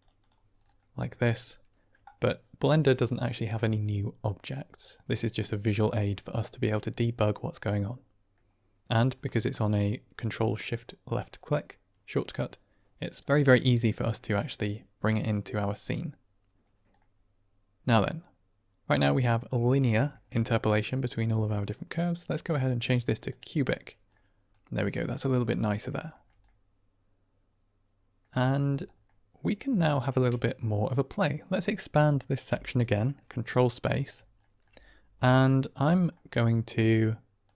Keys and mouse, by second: 0.1 click, 0.7-1.8 middle drag, 6.6-8.2 middle drag, 10.2 click, 16.9-18.9 middle drag, 20.0 shift+middle drag, 20.9 middle click, 22.5 click, 24.0-24.4 middle drag, 25.0-25.7 middle drag, 26.0 shift+middle click, 26.5-28.1 middle drag, 28.9-31.3 middle drag, 32.4 ctrl+space, 33.5 drag, 33.6-34.0 middle drag, 34.3-35.1 shift+middle drag, 35.3 middle click, 36.1-36.7 middle drag, 37.4 click.